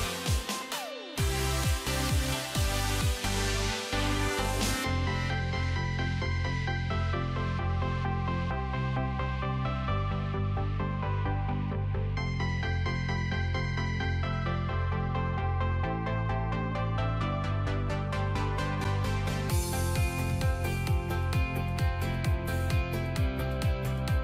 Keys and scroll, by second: 17.7 alt+space.